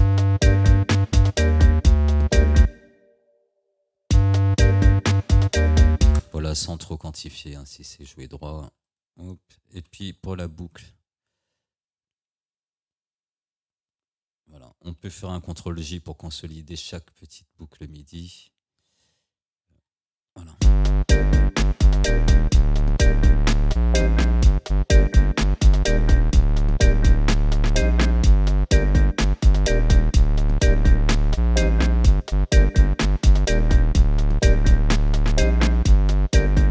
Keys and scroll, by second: 2.6 space, 4.1 space, 6.2 space, 9.8 Delete, 15.9 ctrl+j, 17.9 ctrl+j, 19.9 ctrl+l, 20.6 space.